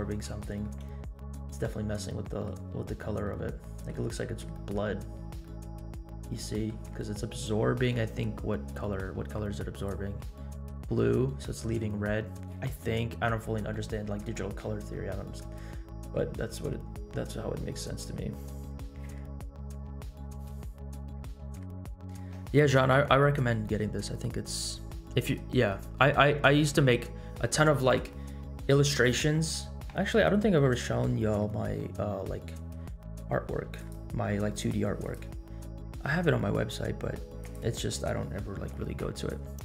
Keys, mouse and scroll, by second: 0.5 scroll down 1, 0.6-1.9 middle drag, 2.2-2.5 middle drag, 2.8-3.2 scroll up 1, 3.2-3.8 middle drag, 4.1-4.5 scroll up 1, 4.7 middle click, 4.9-5.4 scroll up 2, 5.4 middle click, 6.3-6.7 middle drag, 9.7 click, 13.4-14.5 scroll down 4, 14.2-14.6 middle drag, 14.9-15.4 middle drag, 15.6 scroll down 1, 15.9-16.3 middle drag, 16.6 scroll up 2, 17.7 scroll down 1.